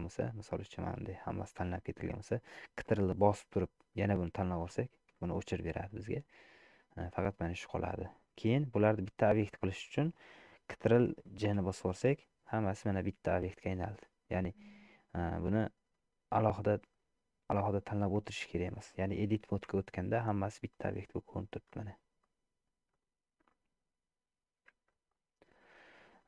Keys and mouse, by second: 0.3 click, 3.6-4.7 ctrl+drag, 5.4-6.6 middle drag, 7.1 middle click, 8.9 shift+middle click, 11.7 ctrl+j, 13.2 click, 14.5 middle click, 15.4 click, 16.6-17.8 drag, 19.2 middle click, 19.8 Tab, 20.8 middle click, 21.8 click, 22.3 middle click, 23.0 click, 23.6 middle click, 24.8 Tab, 25.8 middle click.